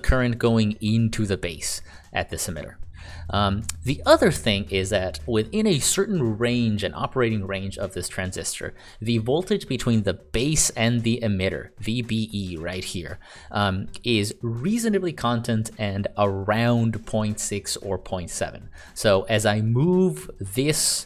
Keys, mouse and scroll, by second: 0.3 click.